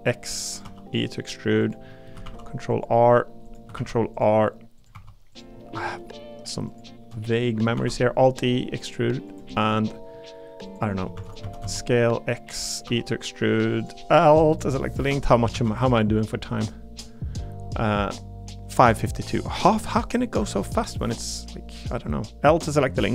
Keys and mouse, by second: 0.5 click, 0.6 e, 1.9 click, 2.2 ctrl+r, 3.7 ctrl+r, 4.8 click, 4.9 3, 5.6 shift+middle click, 7.1 middle click, 7.8 alt+e, 9.3 click, 9.5 middle click, 10.0 middle click, 11.1 shift+d, 11.4 s, 11.6 x, 12.9 e, 13.8 click, 15.0 l, 15.5 shift+d, 16.2 click, 19.7 click, 23.0 l.